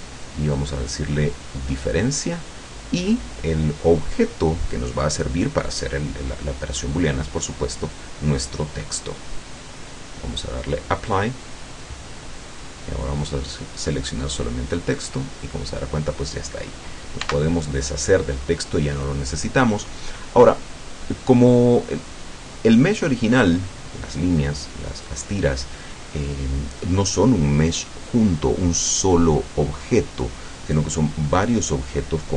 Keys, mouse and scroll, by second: 0.9 click, 2.0 click, 8.0 click, 9.0 click, 11.2 click, 11.9-12.7 middle drag, 13.2 right click, 14.7-15.6 drag, 17.2 x, 17.8 click, 18.4-19.2 middle drag, 19.3 scroll down 2, 20.2-22.3 middle drag, 22.3-22.6 scroll down 1, 24.8-25.8 middle drag, 26.6-26.9 scroll down 1.